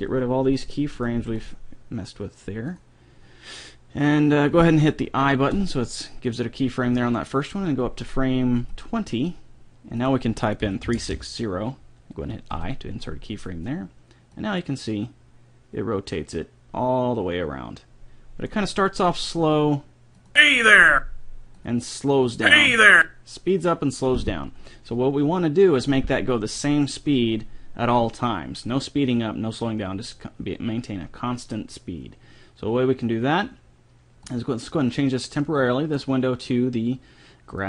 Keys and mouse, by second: 0.2 Delete, 1.4 Delete, 5.9 i, 8.8-10.5 drag, 10.6-12.0 drag, 12.8 i, 14.7-16.4 drag, 19.5-21.2 drag, 21.3-25.6 drag, 34.4-36.2 drag.